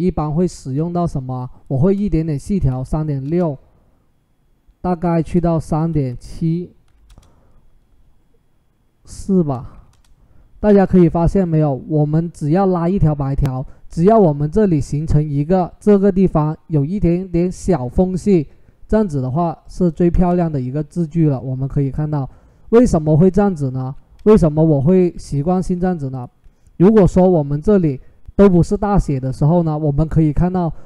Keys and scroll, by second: 2.1-3.3 typing, 5.4-7.1 typing, 9.6 4, 9.6 Return.